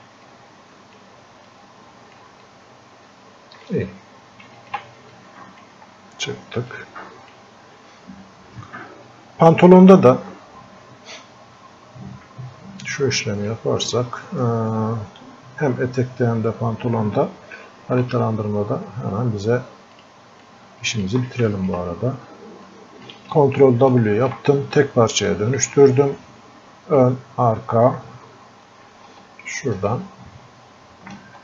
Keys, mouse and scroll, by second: 0.3 click, 1.5 click, 2.5-4.6 drag, 5.2 click, 5.9-6.7 scroll up 1, 6.7-13.5 drag, 13.5-21.5 drag, 22.7-24.1 alt+drag, 24.1 ctrl+w, 24.8 click, 25.7-27.7 drag, 27.7 scroll up 1, 29.9-31.4 ctrl+alt+drag.